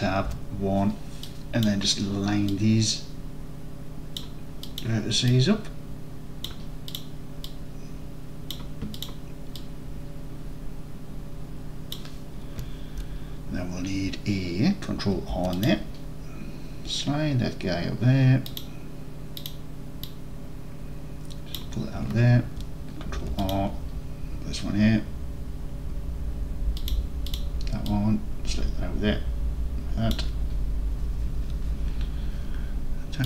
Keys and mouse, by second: 0.3 1, 1.4-1.7 drag, 2.7-4.2 drag, 4.8 click, 5.3-6.5 drag, 7.5-8.5 drag, 9.6-12.0 drag, 15.2 ctrl+r, 18.5 click, 20.3-21.6 drag, 23.2 ctrl+r, 26.9 click, 27.4-30.2 drag.